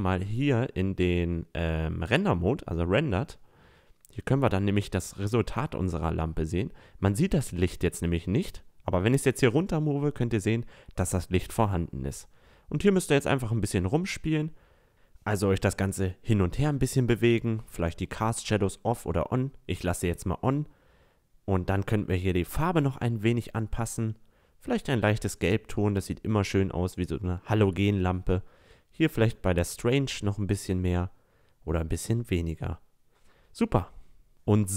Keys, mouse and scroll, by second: 0.0-2.8 drag, 7.6-9.5 drag, 18.1 click, 22.3-24.2 drag, 27.6-29.4 drag, 31.0 click.